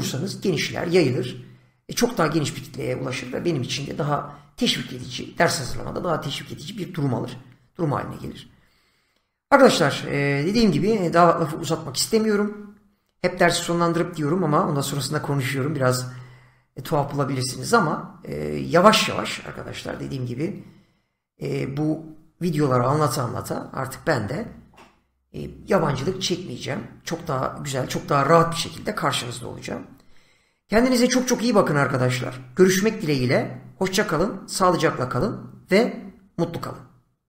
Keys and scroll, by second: 13.2 Left.